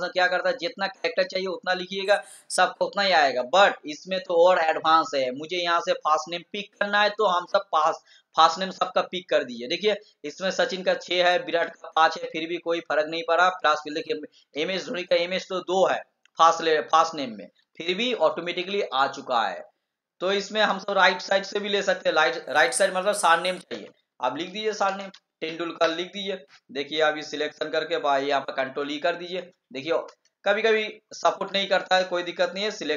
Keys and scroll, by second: 28.7 ctrl+e.